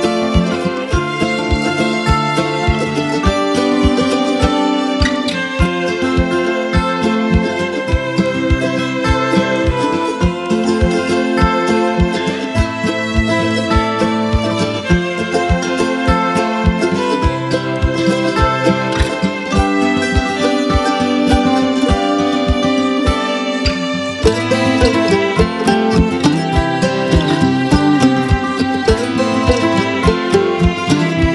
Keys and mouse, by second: 1.2 click, 3.0 Delete, 4.9 click, 7.3 click, 12.1 ctrl+b, 13.2-15.1 drag, 26.1 click, 30.8 click, 30.9 Delete.